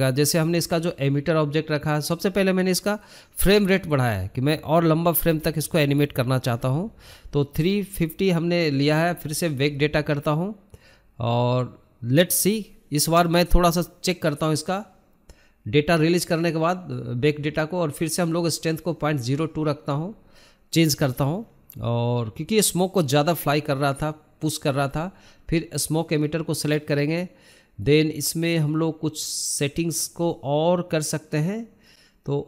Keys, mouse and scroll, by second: 19.3 scroll down 2, 19.8-20.3 scroll up 3, 20.3 scroll down 2, 21.4-22.1 scroll up 5, 26.7-27.0 scroll down 2, 29.4-30.6 scroll up 15.